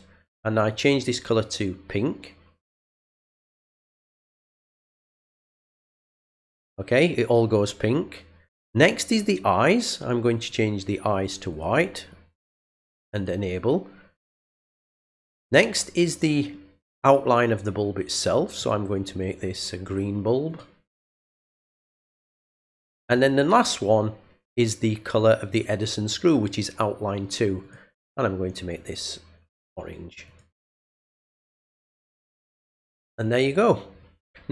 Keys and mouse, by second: 0.7 click, 3.5 click, 4.9 click, 6.0 click, 8.7 click, 10.3 click, 11.5 click, 13.1 click, 18.6 click, 20.5 click, 21.3 click, 22.5 click, 27.6 click, 29.4 click, 30.2 click, 31.9 click, 33.0 click.